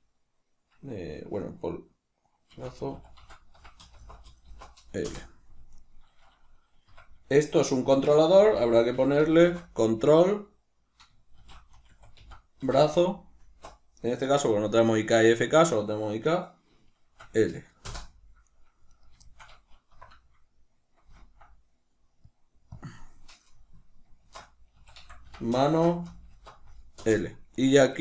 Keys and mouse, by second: 5.6 right click, 6.7 F2, 18.8 right click, 19.2-27.4 shift+middle drag, 19.8 F2, 27.4 right click, 27.9-28.0 shift+middle drag.